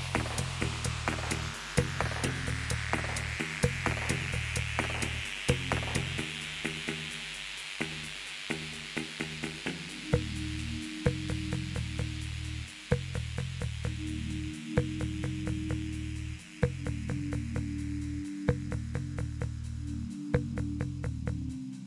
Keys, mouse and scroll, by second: 0.6 /, 3.2-4.3 drag, 6.7-9.8 drag, 9.8-14.6 typing, 18.6 space.